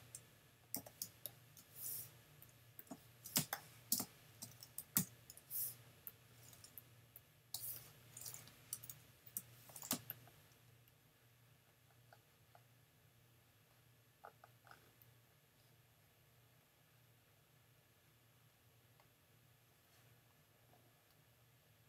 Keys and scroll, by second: 0.8 v, 3.4 super+space, 4.0 space, 5.0 n, 7.5 space, 8.5 super+space, 8.7 super+-, 9.9 super+space.